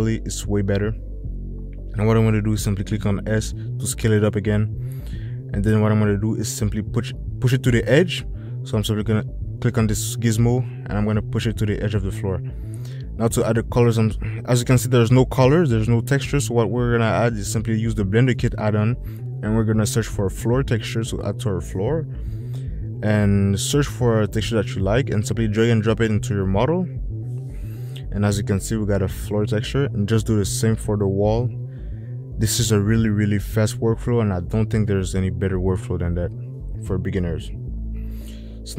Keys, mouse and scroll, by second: 5.2 s, 8.3 click, 9.7 click, 18.2 click, 20.4 click, 21.8 o, 33.3 click.